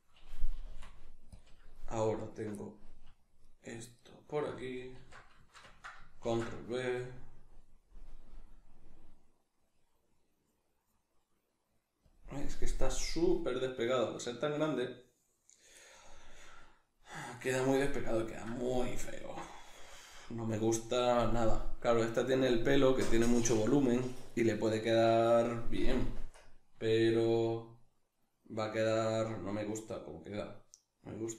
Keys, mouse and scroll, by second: 0.5 click, 0.5 g, 2.2 alt+right click, 2.6 middle click, 3.4 alt+right click, 4.0 alt+right click, 4.9 alt+q, 5.4 ctrl+shift+middle click, 6.2 ctrl+b, 12.1-15.8 drag, 15.8-22.7 middle drag, 26.9-31.3 shift+middle drag.